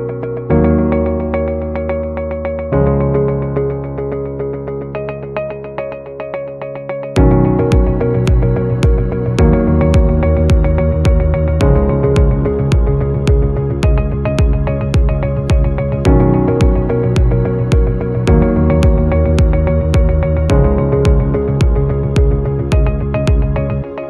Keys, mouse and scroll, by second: 2.3 shift+click, 5.8 shift+click, 8.4 shift+click, 9.8 shift+click, 10.8 right click, 13.5 shift+click, 16.1 double click, 19.5 right click, 22.2 scroll up 1.